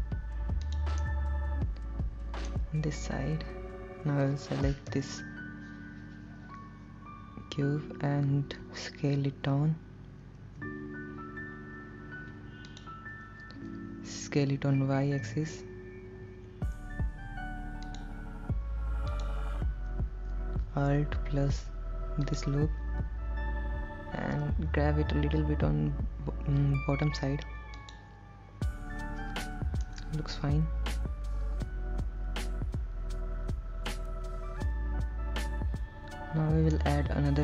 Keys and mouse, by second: 0.9 click, 1.3-2.7 middle drag, 5.2 ctrl+l, 10.6 s, 12.9 click, 14.5 s, 15.5 y, 18.1 click, 19.3 click, 24.9 g, 25.2 g, 28.0 click, 30.1-37.1 middle drag.